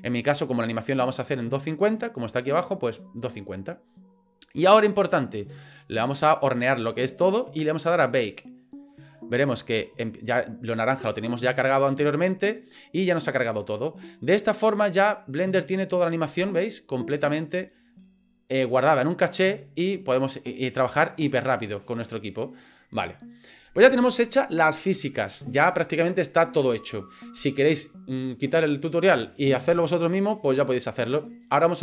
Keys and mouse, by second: 5.8-7.4 drag, 8.7-12.2 drag, 15.3 click, 16.4 drag, 16.8-23.6 drag.